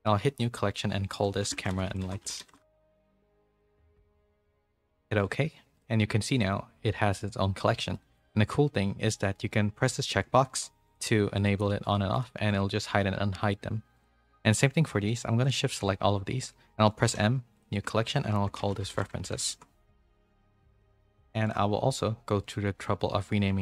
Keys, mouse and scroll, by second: 7.9 middle click, 10.4 click, 10.8 click, 11.8 click, 12.1 click, 12.4 click, 13.9 click, 22.4 click.